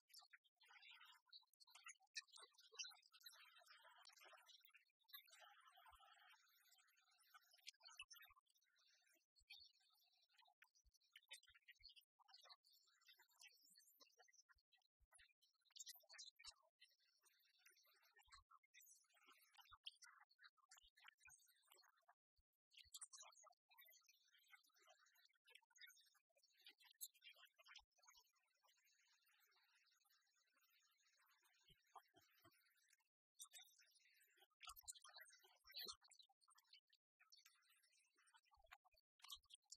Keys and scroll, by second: 1.6 ctrl+d.